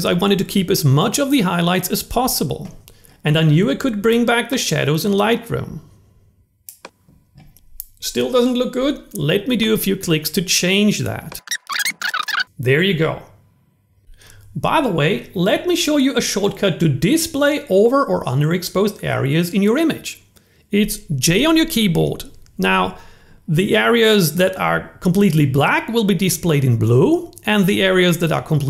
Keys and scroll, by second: 21.0 j.